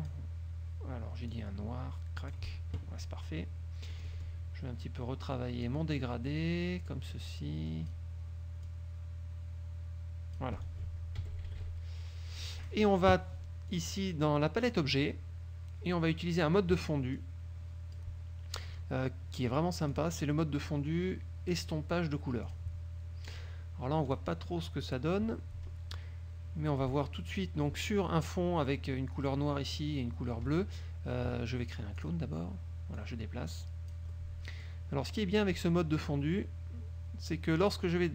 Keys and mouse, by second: 1.4-2.6 drag, 4.1 click, 5.4 click, 7.3 click, 8.8-10.7 drag, 11.4 F1, 12.8 click, 13.9 click, 14.8 click, 17.3-18.3 drag, 20.0 click, 22.6 click, 23.4 click, 24.2 click, 32.1 click, 33.1-34.2 drag, 35.8 click, 37.7-38.1 drag.